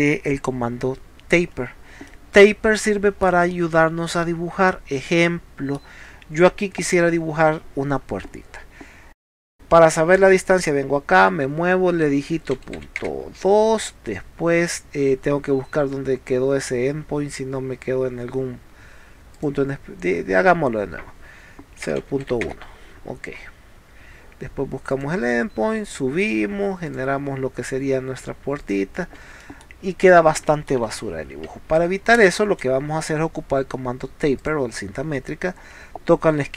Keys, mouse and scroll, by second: 2.1-3.3 middle drag, 4.6 scroll up 1, 5.1 middle click, 6.1 scroll up 1, 9.4 click, 10.6 click, 19.4 click, 25.0 click, 26.3 click, 26.9 click, 28.7 click, 29.1 Escape, 29.5 middle click, 30.5 middle click, 31.0 ctrl+z, 34.4 click.